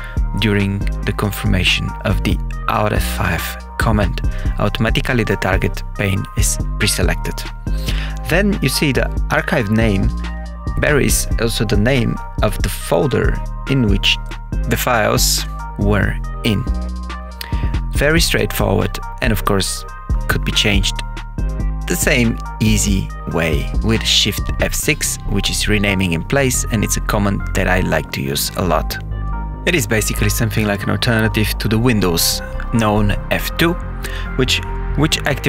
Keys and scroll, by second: 15.5 shift+F6, 16.1 Left, 17.2 BackSpace, 23.7 Escape, 26.9 Escape, 28.3 shift+F6, 29.2 Left, 31.9-35.4 typing.